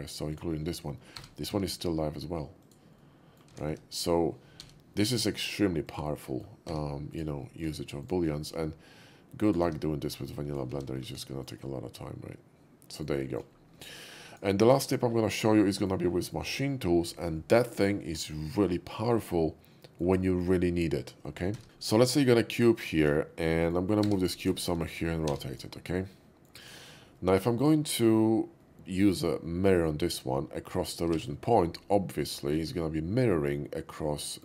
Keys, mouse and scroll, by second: 0.3 click, 1.2 g, 1.5 x, 2.6 click, 2.6 g, 3.0 middle click, 3.5 s, 3.7 x, 4.5 y, 5.9 click, 6.2 middle click, 6.7 Tab, 7.0 click, 7.4 middle click, 7.9 shift+click, 8.4 ctrl+b, 9.5 click, 9.6 Tab, 10.1-10.6 middle drag, 10.7 shift+2, 11.2 shift+middle click, 11.3 shift+middle drag, 11.3 shift+2, 11.7-13.0 shift+middle drag, 13.3 shift+middle click, 14.2 shift+click, 14.7 x, 14.8 click, 15.5-15.9 middle drag, 16.1 shift+middle click, 19.7 middle click, 20.2 shift+middle click, 21.5 shift+a, 22.0 shift+middle click, 22.6 shift+middle click, 23.1 shift+middle click, 23.4 shift+middle click, 24.0 g, 24.3 click, 24.5 middle click, 24.5 shift+g, 25.1 r, 25.5 click, 26.0-26.5 middle drag, 26.8 shift+middle click, 27.2 shift+middle click, 28.5 shift+middle click, 31.1 alt+x, 32.2 alt+x, 32.2-34.4 middle drag.